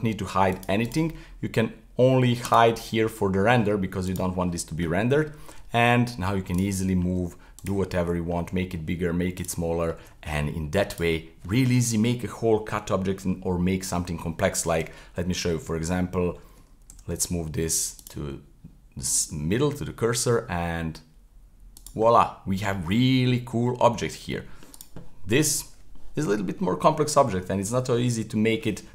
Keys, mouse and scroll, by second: 0.5 click, 2.5 click, 4.1 right click, 5.5 g, 6.7-7.1 middle drag, 7.1 g, 7.9-8.4 middle drag, 8.4 s, 9.6 middle click, 10.0 g, 11.2-14.3 middle drag, 15.5-16.9 middle drag, 16.9 shift+s, 19.1-19.7 middle drag, 19.7 s, 22.1-24.8 middle drag, 24.8 right drag, 25.0-28.9 middle drag.